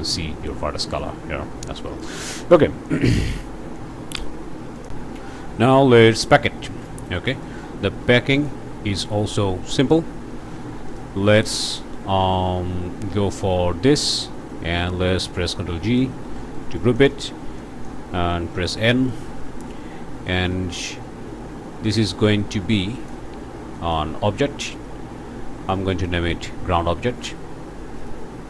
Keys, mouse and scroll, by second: 2.0 click, 4.8 click, 5.8 click, 6.3-7.2 scroll down 5, 6.6 ctrl+space, 7.4 click, 7.6 scroll up 2, 8.1 click, 10.9 click, 11.6-14.2 drag, 14.5 click, 15.7 ctrl+g, 16.6 click, 17.0 right click, 17.6 click, 18.3 click, 18.8 n, 19.4 click, 20.3 click, 21.8-23.4 drag, 23.7 click, 24.6-25.9 drag, 26.0 click, 27.2 click, 28.0 click.